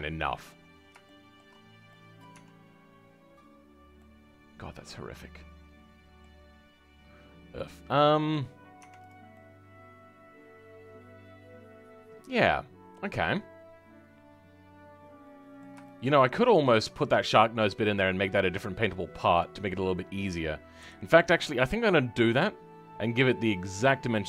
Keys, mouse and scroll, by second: 0.6-1.0 scroll up 5, 1.0 shift+middle click, 1.5-1.8 scroll up 2, 1.8 middle click, 2.3 Tab, 3.9-6.7 middle drag, 6.7-7.2 scroll down 2, 7.2-7.6 scroll down 1, 7.6-8.7 middle drag, 8.7 Tab, 9.3-12.3 middle drag, 15.8 shift+middle click, 16.2-16.6 scroll up 2, 16.6-20.7 middle drag, 20.7 KP_3.